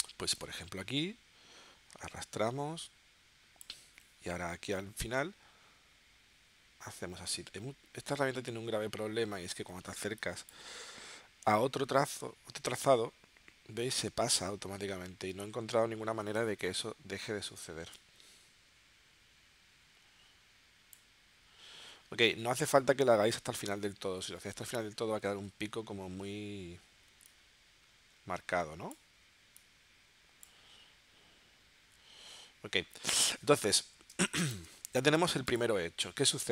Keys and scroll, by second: 10.1 space, 25.3 super+z, 31.7 super+z, 34.1 space, 35.2 v.